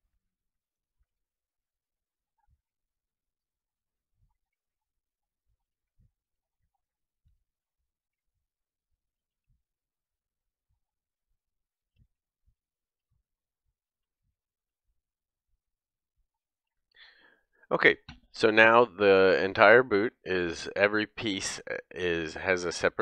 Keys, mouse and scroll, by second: 0.0 click, 0.2 ctrl+Tab, 0.7 click, 1.1 shift+k, 1.3 ctrl+Tab, 1.4 click, 1.6 ctrl+Tab, 2.4 shift+k, 2.5-3.8 ctrl+drag, 2.6 ctrl+Tab, 2.7 ctrl+Tab, 3.2 ctrl+Tab, 3.9 shift+k, 4.1 ctrl+Tab, 4.7 ctrl+Tab, 4.9 click, 5.7 shift+k, 5.9 ctrl+Tab, 6.3 ctrl+Tab, 6.5 click, 6.6 middle click, 7.3 shift+k, 7.4 ctrl+Tab, 7.6 ctrl+Tab, 7.9 click, 8.1 ctrl+Tab, 9.2 shift+k, 9.4 ctrl+Tab, 10.2 click, 10.4 ctrl+Tab, 11.0-12.0 middle drag, 12.0 shift+k, 12.4 ctrl+Tab, 12.7 click, 12.8 click, 13.0 ctrl+Tab, 13.3 click, 14.0 shift+k, 14.1 ctrl+Tab, 14.3 ctrl+Tab, 14.5 click, 14.9 ctrl+Tab, 15.2 click, 16.7 shift+k, 17.5 shift+k, 20.7 alt+click, 21.4-23.0 middle drag.